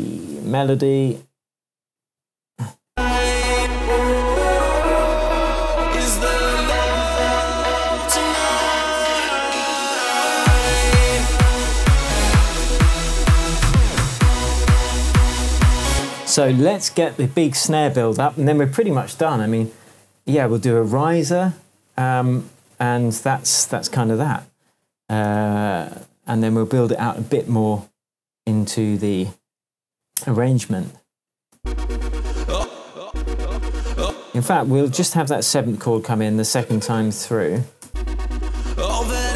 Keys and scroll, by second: 15.9 space, 16.4 super+s, 25.3 super+s, 31.5 space, 37.6 BackSpace, 37.8 space, 39.1 shift+Tab.